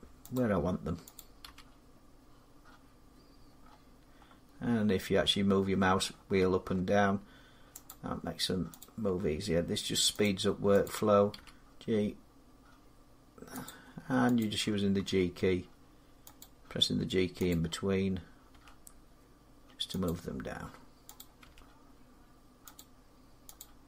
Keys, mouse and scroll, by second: 0.2 click, 1.0 click, 1.3 g, 3.4 scroll up 5, 5.1 scroll down 4, 5.4 scroll up 2, 5.6 scroll down 2, 6.0 scroll up 1, 6.0 scroll down 1, 6.3 scroll up 1, 6.4 scroll down 1, 7.5 scroll up 1, 7.7 click, 9.2 click, 9.2 g, 9.3-9.9 scroll, 10.1 click, 10.7 click, 11.2 g, 11.7-13.4 scroll, 13.5 click, 14.3 click, 14.8 middle click, 14.8 g, 16.2 click, 18.3 click, 18.3 g, 19.9 click, 21.0 click, 21.3 g, 22.6 click, 23.5 click, 23.7 g.